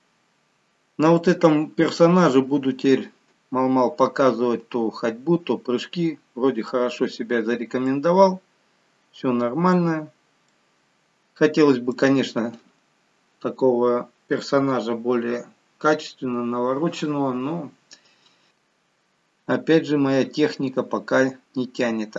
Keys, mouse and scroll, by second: 0.2-1.1 scroll down 1, 1.1 middle click, 7.1-7.8 scroll up 3, 7.8 scroll up 2, 7.9 middle click, 9.9-12.4 scroll down 3, 10.4 middle click, 18.5 middle click, 18.5 scroll down 1, 20.4-21.1 scroll up 2, 21.1-21.8 scroll down 1, 21.8 middle click.